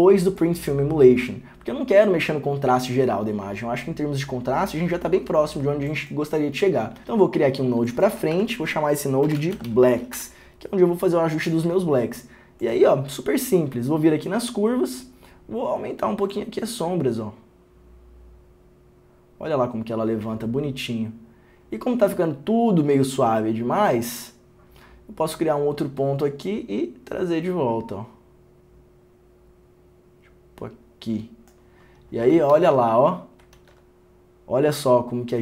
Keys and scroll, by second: 7.1 alt+s, 8.5 Tab, 9.2-10.3 typing, 10.3 Return.